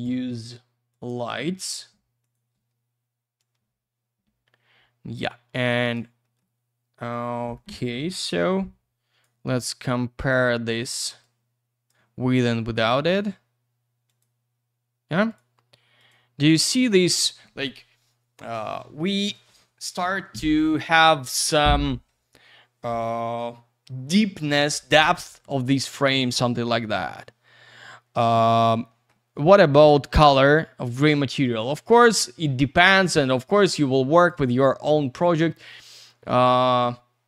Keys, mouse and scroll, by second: 0.0 click, 1.0 click, 1.1 click, 1.6 w, 2.2 click, 2.3 click, 2.5 w, 3.4 click, 5.6 click, 6.2 middle click, 6.3 middle click, 6.5 c, 8.4 click, 9.5-10.2 scroll down 1, 10.2 click, 10.3 click, 11.2 click, 12.8 click, 12.9 click, 14.0 click, 14.2 click, 15.3 click, 15.3 click, 16.0 click, 16.1 click, 26.7 middle click, 26.9 middle click, 27.0 m, 28.9 middle click, 29.1 middle click, 29.4 scroll down 1, 29.7 middle click, 29.9 middle click, 30.1-31.0 scroll up 1, 31.0 click, 31.1 click, 31.1 click, 31.3 click, 34.2 click, 34.2 click, 36.0 click.